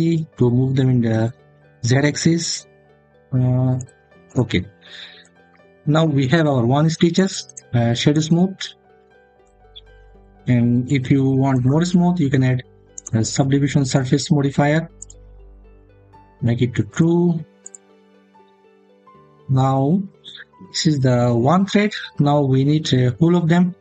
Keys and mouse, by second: 3.6 click, 4.1 click, 5.4 Tab, 7.3 right click, 12.7-15.1 drag, 16.8 click, 17.4 click.